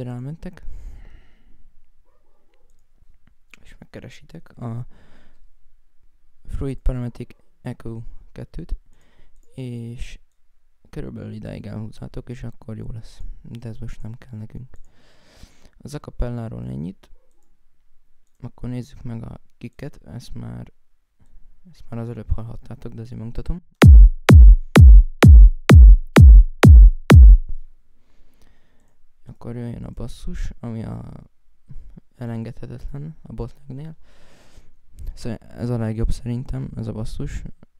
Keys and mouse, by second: 8.1 right click, 12.9 Escape, 13.3 right click, 13.5 click, 14.1 click, 18.1 right click, 19.6 right click, 28.6 right click, 29.6 right click.